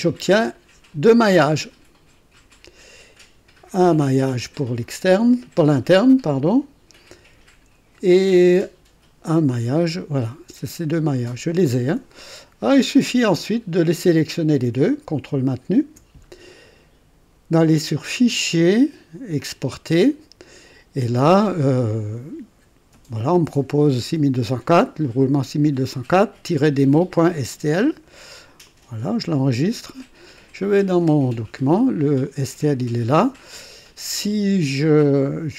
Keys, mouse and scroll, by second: 8.2 &, 11.3 typing, 13.7 click, 15.7 ctrl+click, 18.0 click, 19.3 click, 28.6 click, 30.3 click.